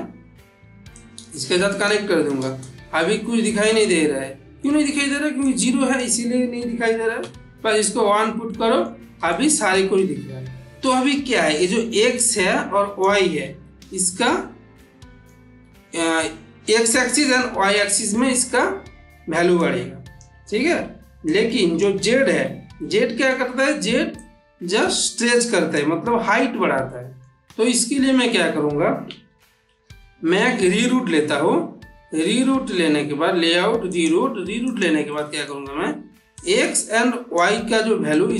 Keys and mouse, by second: 0.8-1.7 drag, 2.3 ctrl+space, 3.8 ctrl+space, 3.9-4.5 ctrl+middle drag, 5.3-5.9 click, 8.3-9.0 middle click, 9.1-9.8 ctrl+middle drag, 12.0-12.9 drag, 13.6 ctrl+z, 14.6-15.3 middle drag, 18.2 shift+middle click, 19.5-20.1 click, 20.4 ctrl+z, 21.1-21.8 click, 22.1 ctrl+z, 22.7-23.3 middle click, 24.0-25.6 drag, 26.1 ctrl+z, 27.1-27.4 middle drag, 29.0 middle click, 29.5 shift+a, 33.8 click, 35.0-35.6 middle click, 36.2-37.5 drag.